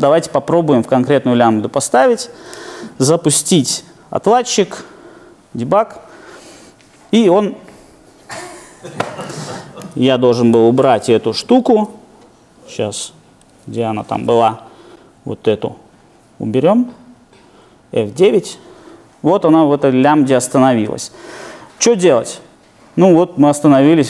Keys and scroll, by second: 11.5 shift+super+F8, 14.0 shift+super+F8, 18.2 alt+super+r.